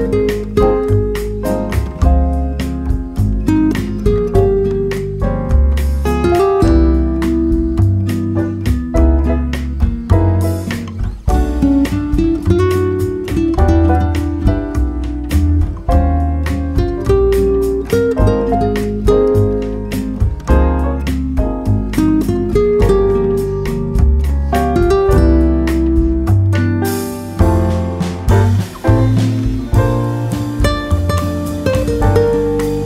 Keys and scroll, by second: 0.8 Up, 2.3 Right, 7.2-10.3 typing, 11.5-13.8 typing.